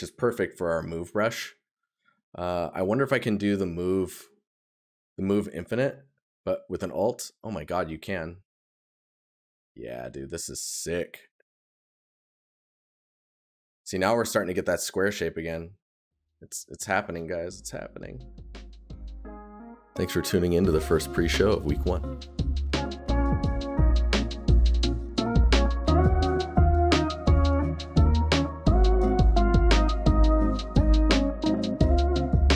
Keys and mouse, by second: 7.2 right click, 9.5 right click, 12.5 right click, 14.9 right click, 18.3 right click.